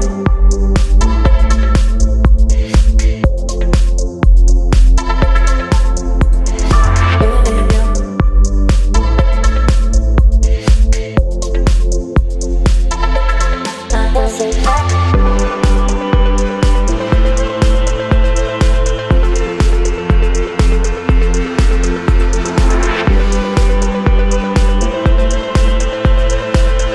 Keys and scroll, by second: 13.9 space, 18.9 ctrl+t, 24.9 space.